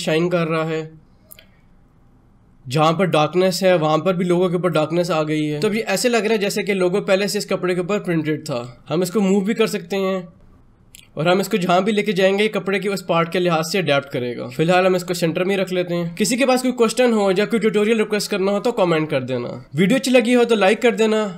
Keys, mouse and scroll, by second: 8.5 z, 9.1-14.4 drag.